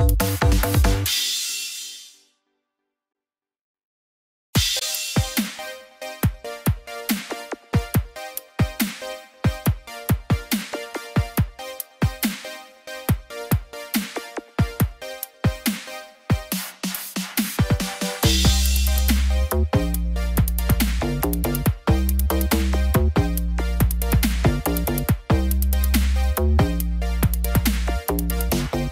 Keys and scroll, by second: 25.7 ctrl+shift+i.